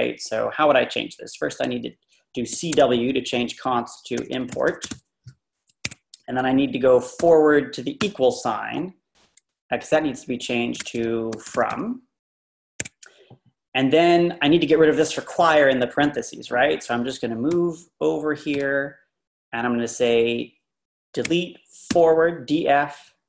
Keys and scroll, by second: 2.3-5.4 typing, 5.8 Escape, 7.8-8.5 typing, 10.5-12.2 typing, 12.8 Escape, 17.6 Right, 21.3 d, 21.9 f.